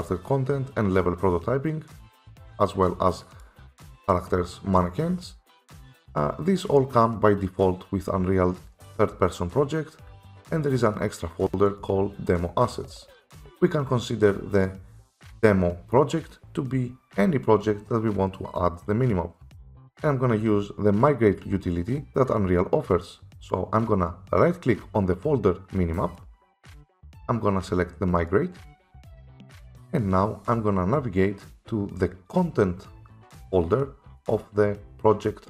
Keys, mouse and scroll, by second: 3.5 click, 11.8 click, 26.1 right click, 28.3 click, 29.9 click.